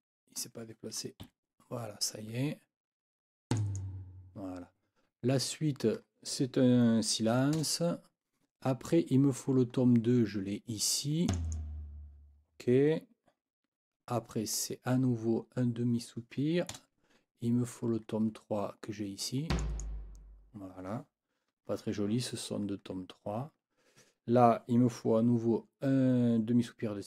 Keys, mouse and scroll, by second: 1.2 Right, 3.5 click, 7.5 0, 11.3 click, 16.7 0, 19.5 click.